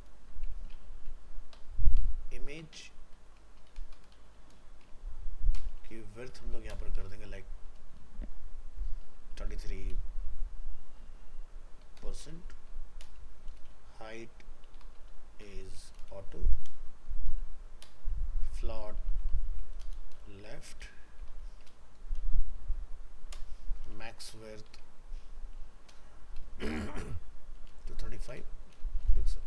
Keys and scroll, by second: 29.4 ctrl+End.